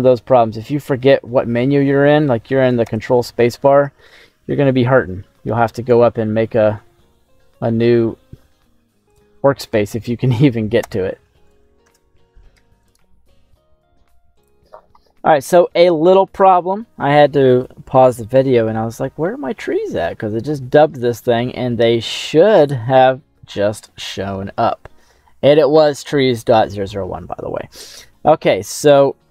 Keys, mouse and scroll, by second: 0.2 scroll up 2, 0.7 middle click, 0.9 click, 1.6 scroll down 1, 2.8 ctrl+space, 4.5 scroll down 2, 11.5 right click, 11.8 ctrl+space, 15.6 middle click, 16.7-18.0 scroll down 2, 18.8-19.2 scroll down 2, 19.2 middle click, 19.8 scroll up 2, 20.1-20.8 scroll down 2, 20.8 middle click, 22.1-22.9 scroll up 4, 27.2-28.0 scroll down 6, 27.9-29.3 middle drag.